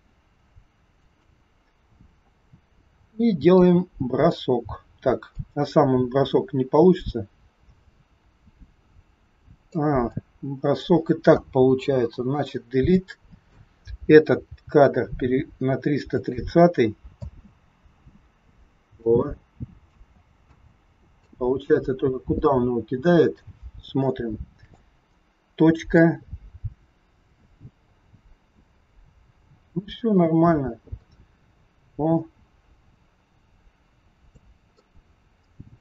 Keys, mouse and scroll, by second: 3.5 middle click, 5.3 click, 10.1 click, 11.7 Delete, 13.0 click, 14.4 g, 17.1 space, 18.0 space, 18.7 scroll down 1, 19.0 middle click, 20.1 space, 20.4 space, 21.2 click, 24.0 shift+middle click, 25.0-26.0 scroll down 1, 26.0 click, 34.8 middle click.